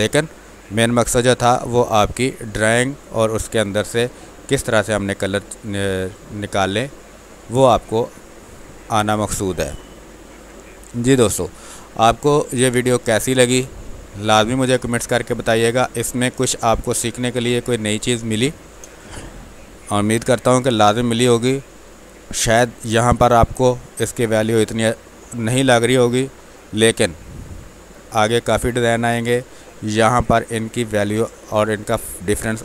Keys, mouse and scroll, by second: 3.6 space, 3.8 alt+click, 5.6 ctrl+click, 12.8 space, 13.2 click, 13.3 space, 14.0 alt+click, 15.0 ctrl+click, 16.5-22.8 drag, 22.8 ctrl+s.